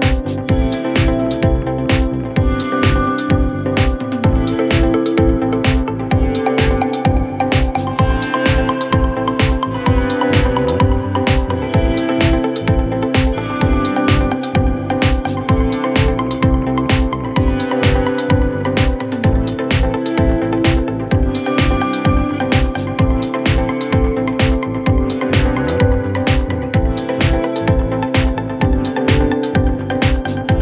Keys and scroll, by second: 13.9 F3, 14.3 Escape, 15.3 shift+F2, 15.6 Escape, 21.9 g.